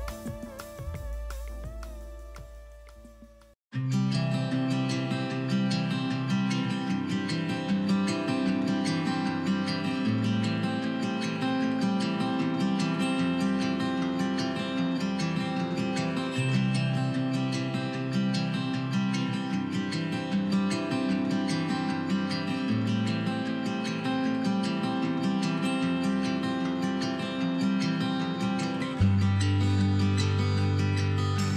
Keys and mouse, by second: 0.0-0.4 typing, 1.5 z, 4.0 click, 4.3 ctrl+z, 4.3 a, 4.3 ctrl+z, 5.3-6.8 typing, 6.2 click, 7.6 middle click, 8.5 z, 10.9-12.4 middle drag, 12.5 l, 13.4 a, 14.4 middle click, 14.8-15.6 typing, 16.3-18.0 drag, 16.8 l, 18.0 ctrl+z, 18.1-21.6 typing, 22.9-24.5 typing, 24.7 click, 25.2 click, 25.5-29.7 typing, 26.1 ctrl+z, 26.5 click, 27.5 ctrl+KP_Add, 27.6 ctrl+KP_Add, 29.3 click.